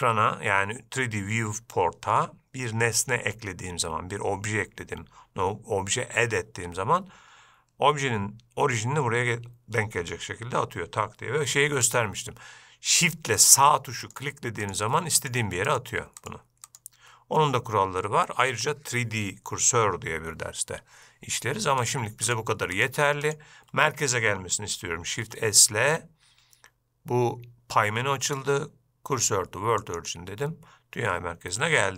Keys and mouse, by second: 12.0 shift+click, 13.5 shift+click, 14.2 shift+click, 14.8 shift+click, 15.3 shift+click, 15.8 shift+click, 16.4 shift+click, 22.0 shift+click, 22.4 shift+click, 23.4-23.7 shift+drag, 25.3 shift+s.